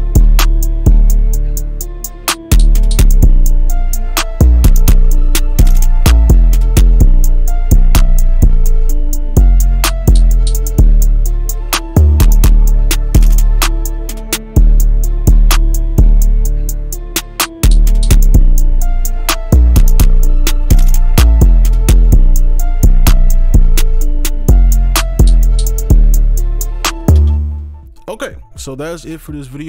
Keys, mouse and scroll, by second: 12.8 right click, 17.7 right click, 27.2 space.